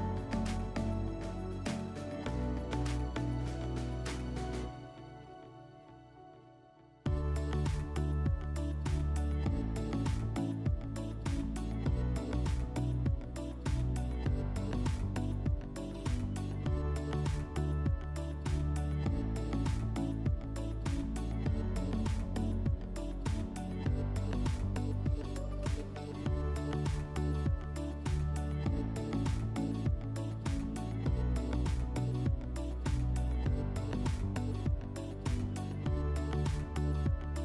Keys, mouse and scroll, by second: 1.0-2.6 drag, 5.1 F4, 6.0 middle click, 15.0 click, 15.5 right click, 16.6 click, 17.6 click, 19.0 alt+w, 20.2 alt+w, 22.0 click, 30.1 click, 31.3 click, 32.3 click, 34.0 click, 34.9 click.